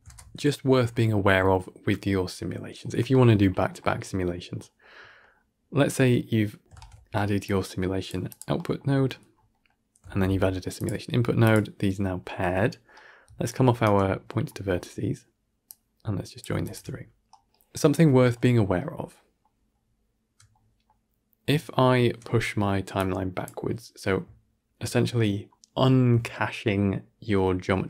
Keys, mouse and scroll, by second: 0.0 ctrl+space, 7.9 shift+a, 13.7-16.3 alt+right drag, 16.5-19.7 alt+shift+drag, 19.7-21.6 alt+scroll up 1, 21.6-22.9 alt+scroll up 4, 22.9-24.4 drag, 24.4-27.8 alt+scroll up 1.